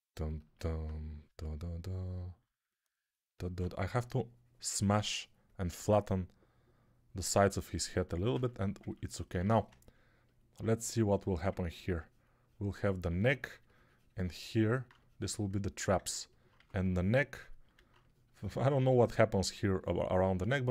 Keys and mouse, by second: 3.7 3, 9.3 1, 13.2 2, 16.4 1, 18.5-20.7 drag, 18.5-20.7 middle drag, 18.5-20.7 right drag, 18.6 2.